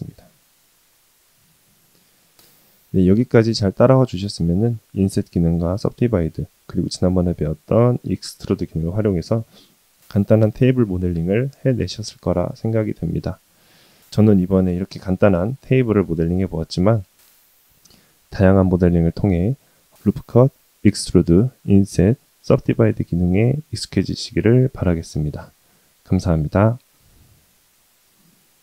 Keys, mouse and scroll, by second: 1.0 Tab, 1.3 middle click, 2.2-2.5 scroll up 1, 2.7 shift+middle drag, 3.6-4.1 scroll up 2, 4.1-4.7 scroll down 2, 4.7 middle drag, 6.7 shift+middle drag, 7.2-8.2 middle drag, 23.5-23.9 shift+middle drag, 24.6-27.1 middle drag.